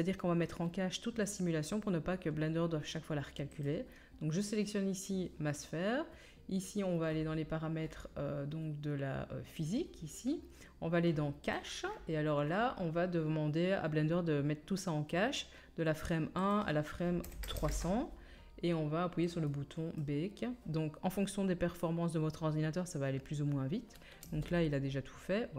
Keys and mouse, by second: 11.5-20.0 middle drag, 11.5-20.0 right drag, 17.5 KP_0, 22.2-24.2 middle drag, 24.2 space.